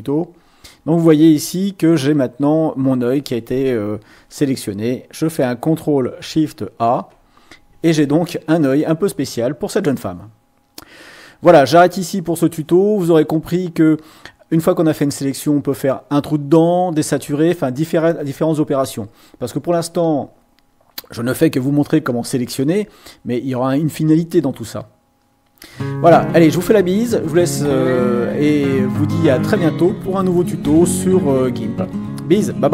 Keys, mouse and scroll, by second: 0.1-0.5 ctrl+scroll down 2, 2.2 scroll up 2, 6.8 ctrl+shift+a, 22.9 click.